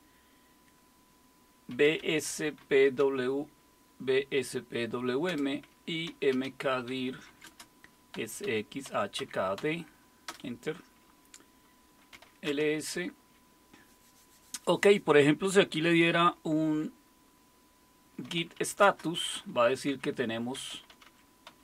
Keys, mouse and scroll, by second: 1.7-3.5 typing, 5.3 Return, 5.8-10.3 typing, 11.9-12.7 typing, 18.0-21.6 typing.